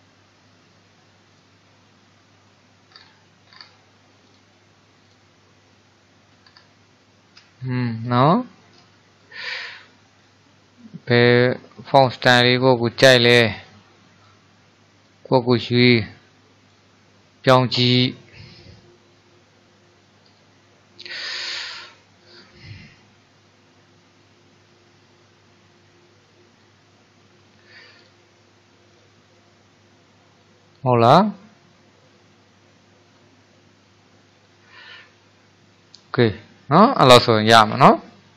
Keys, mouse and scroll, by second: 1.3-4.5 drag, 6.3-7.1 scroll down 3, 7.1 shift+middle click, 7.7-8.0 scroll up 3, 8.4-10.2 shift+middle drag, 10.2-21.8 drag, 23.7-26.5 middle drag, 26.5-29.6 drag, 30.4-31.0 scroll down 1, 31.0-34.1 middle drag, 34.8-37.9 middle drag.